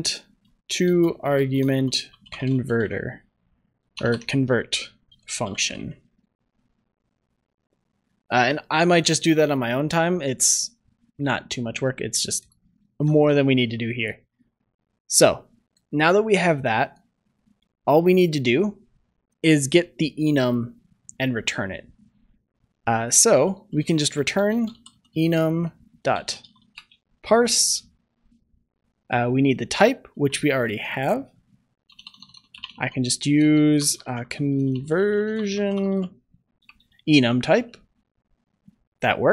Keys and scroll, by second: 12.9 ctrl+s, 36.6 Return.